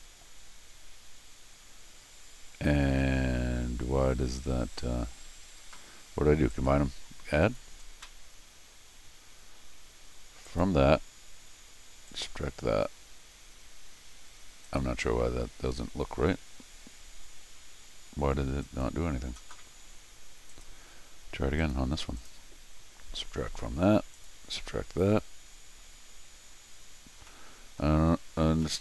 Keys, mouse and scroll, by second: 6.5 right click, 7.4 click, 10.5 click, 12.1 click, 14.7 click, 18.6 click, 20.5 click, 21.6 click, 22.2 click, 24.1 click, 27.3 middle click, 28.1-28.6 scroll up 4, 28.6-28.8 middle drag.